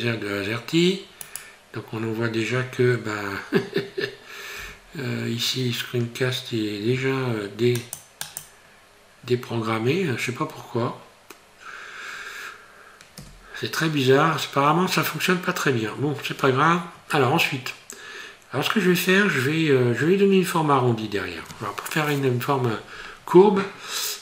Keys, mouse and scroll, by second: 11.5 scroll down 1, 11.7 scroll up 1, 13.2 n.